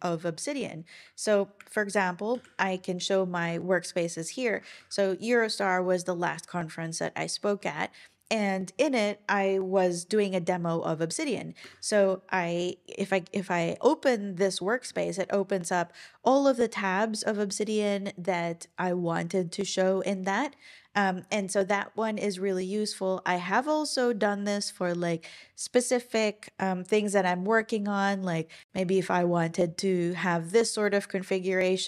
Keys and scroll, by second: 2.3 super+l, 4.6 Down, 4.7 Down, 11.6 Return.